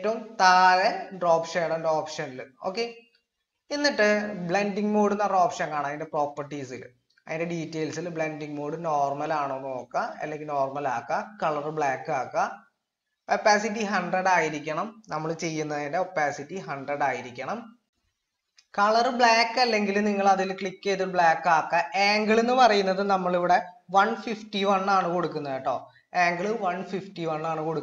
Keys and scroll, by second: 23.9-25.1 typing.